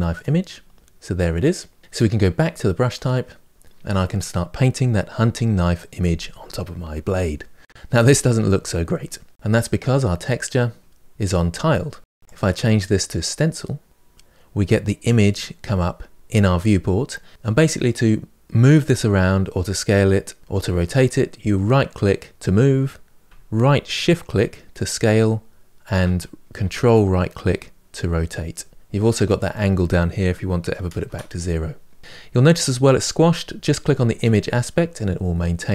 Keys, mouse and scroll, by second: 0.0-6.7 drag, 7.8-18.5 middle drag, 18.5-20.4 right drag, 23.9-34.0 shift+right drag, 34.0-35.7 drag.